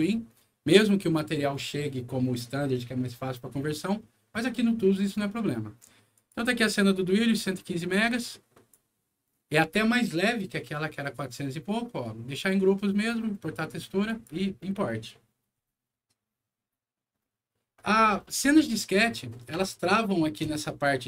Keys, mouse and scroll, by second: 0.3 scroll down 2, 6.1 click, 7.9 click, 14.0 click.